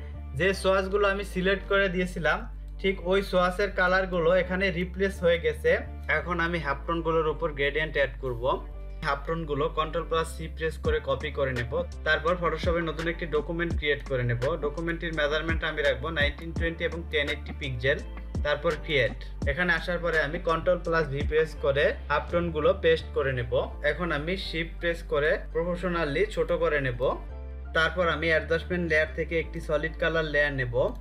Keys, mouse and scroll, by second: 1.6 ctrl+space, 1.8 ctrl+click, 2.1 ctrl+space, 3.3 ctrl+click, 5.6 ctrl+click, 8.5 space, 8.7 click, 10.7 ctrl+c, 13.9 click.